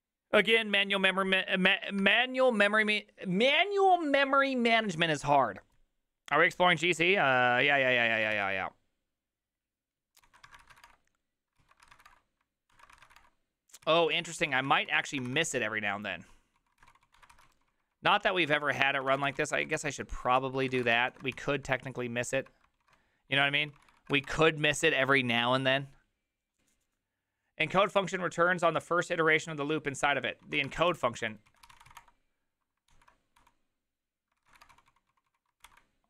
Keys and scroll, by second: 8.4 alt+{, 10.2-21.8 typing, 11.6 ctrl+u, 11.9 ctrl+c, 22.8 ctrl+a, 23.6 ctrl+c, 23.8 ctrl+c, 24.1 ctrl+c, 24.1 Up, 24.3 Return, 30.7 ctrl+a, 30.7-32.4 typing, 30.9 ctrl+c, 32.9 ctrl+t, 33.4-36.0 typing.